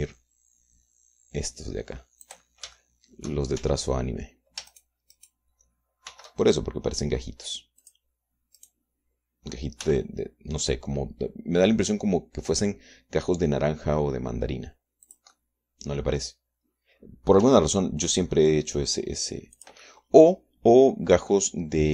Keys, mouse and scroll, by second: 0.3 g, 3.5 click, 3.8 middle click, 4.0 shift+middle click, 4.8 shift+Tab, 5.9 shift+middle click, 6.4 shift+middle click, 7.3 shift+d, 9.1 click, 9.8 right click, 11.1 g, 16.3-17.5 drag, 18.7 g, 20.8-21.9 drag.